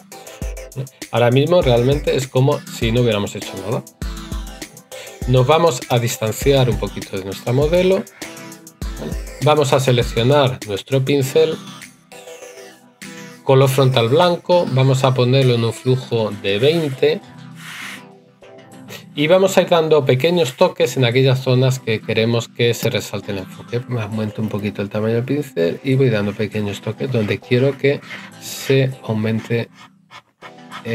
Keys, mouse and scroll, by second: 22.6 right click.